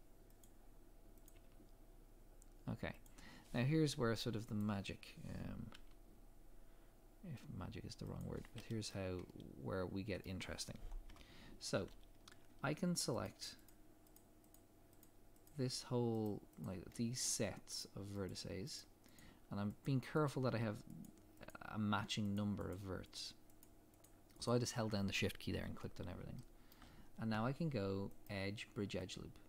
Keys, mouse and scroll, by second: 1.3 click, 1.3 g, 4.6 click, 5.7 g, 8.5 scroll down 1, 8.9 middle click, 11.1 KP_3, 12.2 scroll up 1, 13.2 click, 13.7 shift+click, 16.9 shift+middle click, 17.8 shift+click, 26.4 shift+middle click.